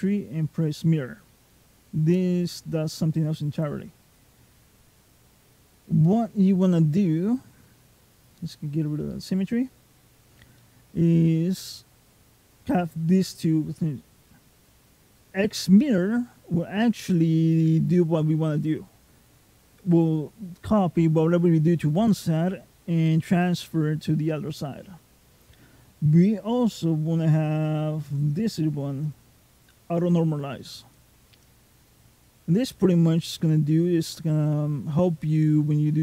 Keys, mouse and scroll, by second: 3.9 click, 4.5-6.3 scroll down 3, 6.3 middle click, 6.3 scroll down 1, 7.9 click, 10.4 middle click, 15.0 click, 28.9 click, 32.6 middle click.